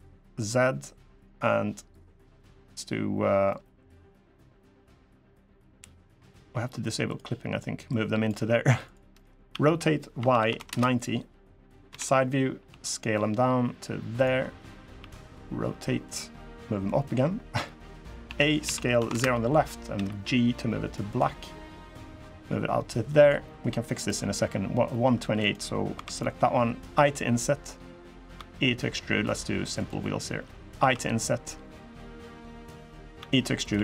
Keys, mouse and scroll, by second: 3.2 middle click, 4.7 middle click, 6.8 click, 7.6 click, 8.6 click, 8.9 middle click, 9.2 r, 11.6 KP_3, 12.4 s, 14.8 r, 16.6 click, 18.0 a, 18.4 s, 19.7 g, 21.2 middle click, 22.1 click, 23.2 middle click, 23.7 click, 24.7 middle click, 25.1 click, 25.7 3, 25.8 click, 26.7 i, 28.1 e, 29.7 middle click, 29.9 scroll up 2, 30.5 i, 32.9 e, 33.5 s.